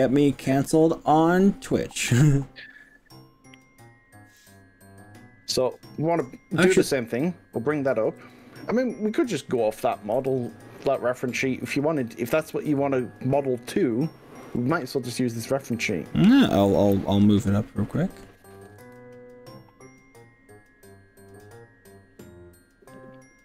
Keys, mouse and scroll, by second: 0.1 scroll up 1, 5.7 click, 7.2 click, 8.2 g, 10.2 y, 12.1 click, 12.7 ctrl+z, 14.5 g, 18.9 z.